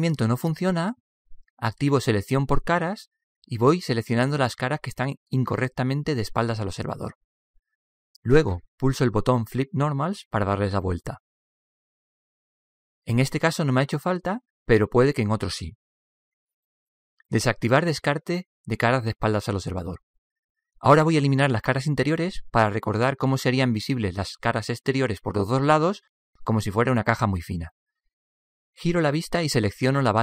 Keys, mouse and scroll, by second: 2.6-4.6 drag, 3.3-4.6 middle drag, 4.2-7.8 right drag, 7.6-9.0 middle drag, 9.9-13.3 drag, 12.1 middle click, 13.3 middle click, 23.1-25.2 middle drag.